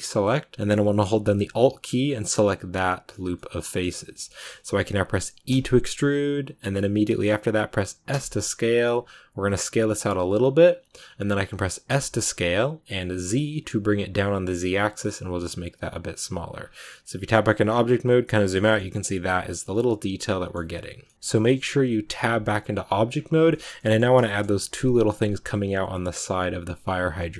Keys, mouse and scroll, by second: 3.1 scroll down 1, 3.2-5.4 middle drag, 5.4 e, 10.9 scroll up 2, 11.8 s, 17.5-18.0 scroll down 11, 18.2 middle click, 18.7 a, 19.8-21.1 middle drag, 21.1 shift+scroll up 2, 23.0-23.4 scroll down 3, 23.4 shift+middle click, 23.5-23.9 scroll up 2, 23.6 middle click, 24.1-27.3 shift+middle drag.